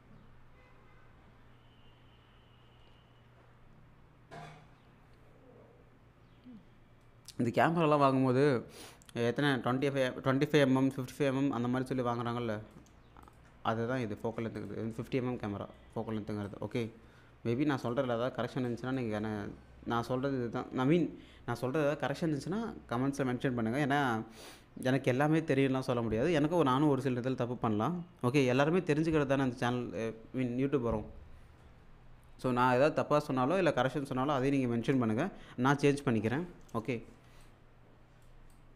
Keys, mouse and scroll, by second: 13.2 ctrl+click, 15.2-15.8 scroll down 1, 15.8 middle click, 15.8 scroll down 1, 16.5-18.0 drag, 18.1 alt+middle click, 18.7 alt+click, 37.4-38.3 alt+drag.